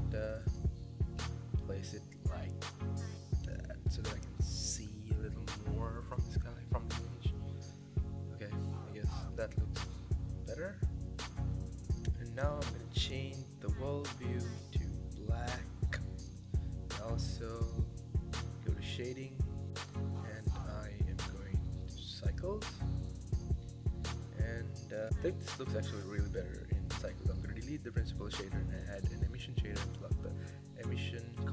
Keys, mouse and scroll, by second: 0.9 g, 2.7 s, 3.1 s, 5.9 g, 6.5 s, 7.8 s, 8.8 g, 9.8 g, 11.6 ctrl+s, 12.8 click, 13.9 click, 15.2 click, 15.9 click, 17.6 click, 19.2 click, 21.1-21.6 drag, 21.6 KP_0, 23.3 click, 23.8 click, 25.0 x, 25.3 click, 25.5 shift+a, 29.0 click, 30.9 click.